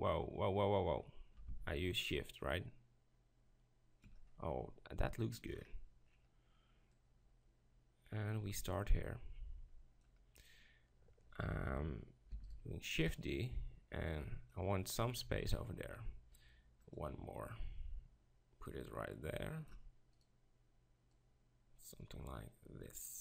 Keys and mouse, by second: 6.2-10.0 middle drag, 7.0-10.0 drag, 12.3 shift+d, 12.5-14.5 right drag, 13.1-15.5 drag, 16.9-23.2 drag, 20.2-23.2 right drag.